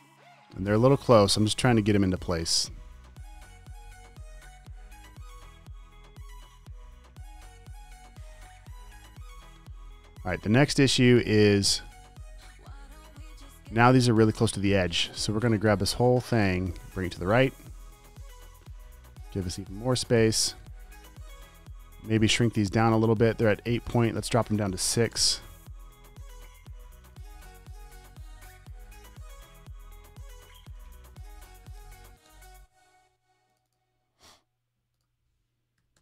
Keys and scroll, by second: 22.2 t, 22.5 super+a, 25.2 6, 29.2 super+a, 31.3 super+a, 31.9 6.